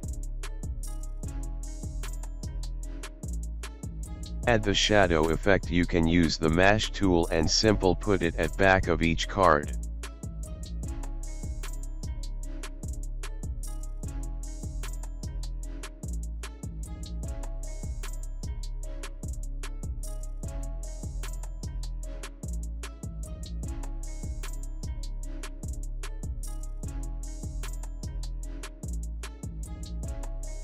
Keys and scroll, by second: 13.8 alt+space, 18.6 ctrl+shift+g, 23.9 space, 26.0 ctrl+x, 27.8 ctrl+alt+shift+f.